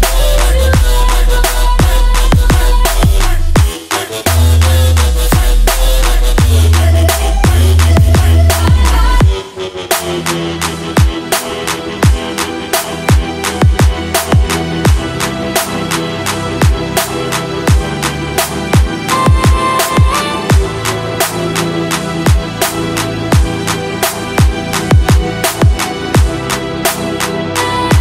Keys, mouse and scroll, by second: 2.9 click, 5.1-7.2 typing, 8.2-10.2 typing, 11.3-12.2 typing, 13.3-15.8 drag, 15.9 right click, 16.8 click, 17.8-20.4 typing, 22.1 Return, 22.8-23.8 drag.